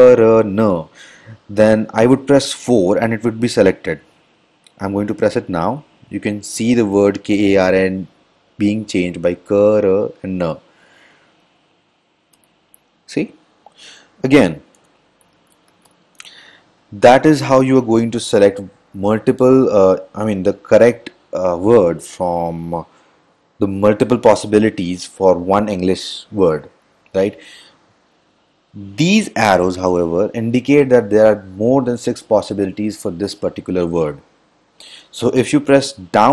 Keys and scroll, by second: 12.6 4, 14.6 Return, 15.0 Return, 15.2-16.6 typing.